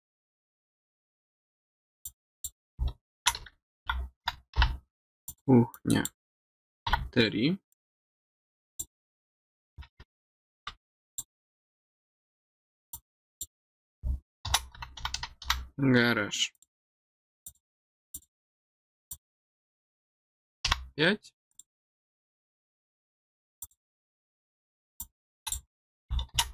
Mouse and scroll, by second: 2.0 click, 5.2 click, 5.7 click, 7.7 click, 8.7 click, 11.1 click, 12.9 click, 16.5 click, 17.4 click, 17.7 click, 18.1 click, 19.1 click, 21.5 click, 23.6 click, 24.9 click.